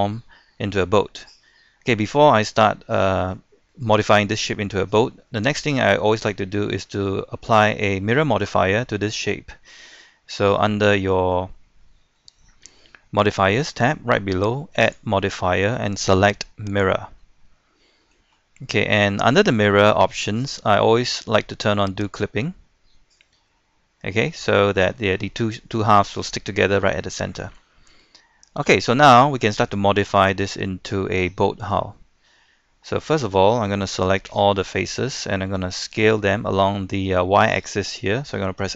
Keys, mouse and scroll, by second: 1.7-2.1 scroll down 1, 2.1-2.6 scroll up 1, 2.6-4.2 middle drag, 4.8 scroll down 1, 5.0 middle click, 6.1 scroll up 1, 6.3-6.8 scroll down 1, 6.8-13.3 middle drag, 14.8 click, 17.6 middle click, 18.3-18.7 scroll up 1, 18.7-22.1 scroll down 1, 22.1 click, 22.7-23.2 scroll up 1, 23.2-28.0 middle drag, 28.0-28.5 scroll down 1, 28.5-33.6 middle drag, 34.3 a.